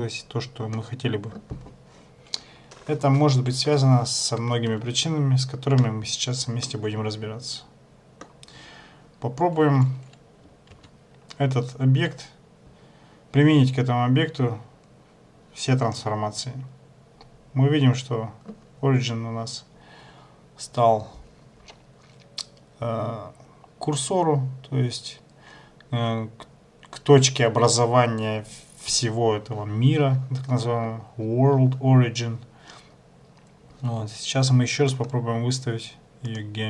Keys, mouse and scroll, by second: 6.7 shift+middle click, 10.9 ctrl+a, 35.1 right click.